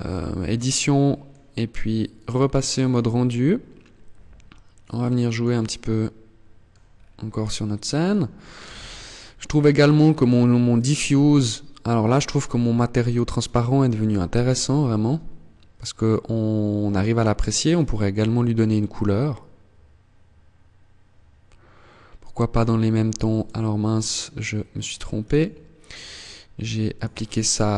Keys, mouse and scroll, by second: 0.0 middle click, 1.3 click, 3.9 middle click, 6.1 scroll up 3, 6.5 shift+middle click, 7.5 scroll up 1, 13.0 KP_0, 16.1 click, 24.1 click.